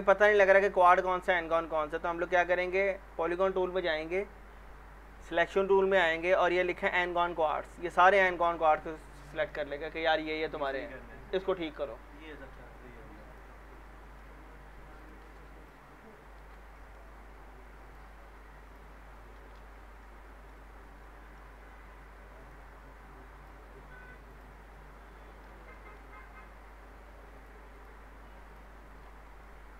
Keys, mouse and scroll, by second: 5.4 click, 7.8 scroll down 1, 8.1-8.7 alt+middle click, 8.5 scroll up 1, 13.3 click, 13.8-14.5 alt+middle click, 14.4 scroll up 2, 15.0 click, 15.6 ctrl+click, 16.4 ctrl+shift+e, 16.7 middle click, 17.8 click, 18.6 ctrl+click, 19.3 ctrl+shift+e, 19.8 scroll down 1, 20.0-20.6 alt+middle click, 21.1 alt+scroll up 1, 21.7-22.4 scroll up 1, 22.4 click, 24.3 ctrl+click, 25.2 ctrl+shift+e, 25.7 alt+middle click, 26.2-27.4 scroll up 1, 27.4 click, 28.5 ctrl+click, 28.8 ctrl+shift+e, 29.1 scroll down 1, 29.4-29.7 alt+middle drag.